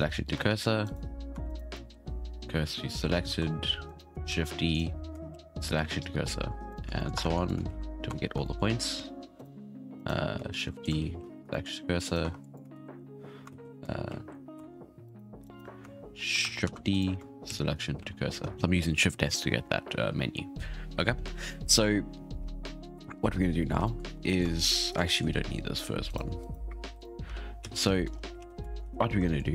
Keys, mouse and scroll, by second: 0.3 Tab, 0.8 right click, 1.3 Tab, 1.4 right click, 1.9 shift+s, 3.4 Tab, 3.8 right click, 4.3 shift+d, 5.3 shift+s, 6.7 right click, 6.9 shift+middle drag, 7.1 Tab, 7.3 click, 7.6 shift+s, 8.0 Tab, 8.4-9.3 shift+middle drag, 9.3 right drag, 9.9 right click, 10.5 shift+d, 11.0 shift+s, 11.5-12.0 shift+middle drag, 12.0 right click, 12.2 Tab, 12.4 click, 12.7 shift+s, 13.5 ctrl+z, 14.0 shift+s, 14.5 Tab, 15.0 right click, 15.4 right click, 16.6 shift+d, 17.4 shift+s, 22.3-22.6 scroll down 1, 22.6-23.4 shift+middle drag, 23.4-23.8 scroll up 1, 23.8-24.1 shift+middle drag, 24.1 scroll down 2, 24.2-24.8 middle drag, 25.0 shift+middle drag, 25.2-26.0 scroll up 4, 26.0 right click, 26.4 right click, 26.8-28.8 typing, 27.4 scroll down 3, 27.9 shift+middle click, 28.0 scroll up 4, 28.5 scroll down 3, 28.7 shift+middle click, 29.2-29.5 shift+middle drag.